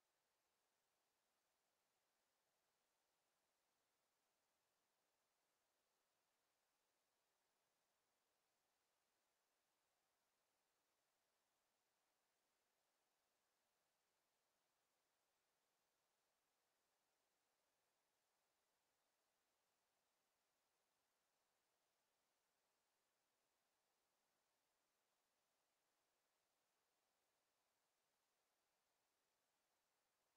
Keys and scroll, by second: 4.5 e, 11.4 w.